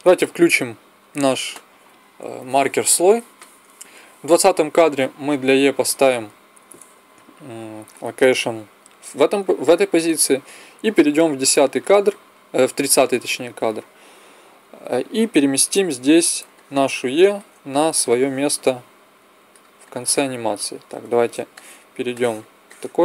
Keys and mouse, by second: 0.4 middle click, 0.8-3.4 drag, 5.1-6.9 right drag, 6.9 i, 11.0 click, 13.4 Left, 17.8 click, 20.4 KP_1.